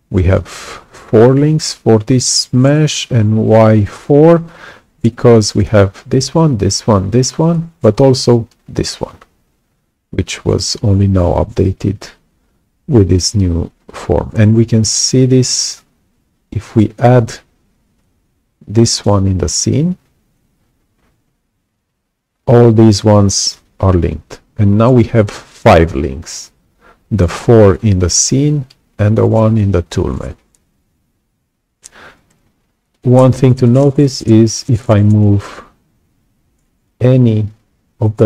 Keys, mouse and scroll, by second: 5.2 click, 8.7-9.0 scroll up 2, 9.0-9.3 scroll down 2, 10.0-10.3 scroll down 2, 15.4 click, 17.9-19.0 right drag, 18.0-19.0 drag, 19.4 click, 32.9 click, 36.8-38.2 alt+drag.